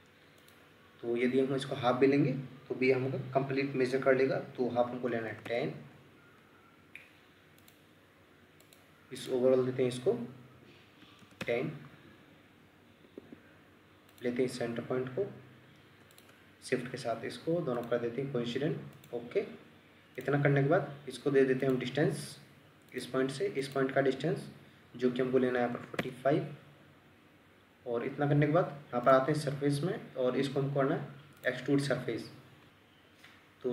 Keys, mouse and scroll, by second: 5.1 typing, 5.4 Return, 11.0 typing, 11.4 Return, 13.1 Escape, 16.1 shift+click, 25.6 typing, 26.0 Return, 32.4-32.7 scroll up 1, 32.7 middle click.